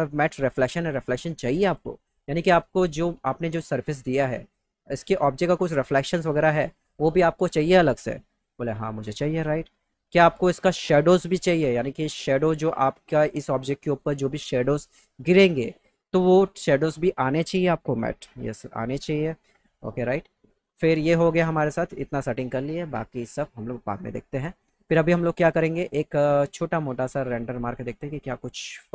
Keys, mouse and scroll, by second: 8.9 click, 19.2 click.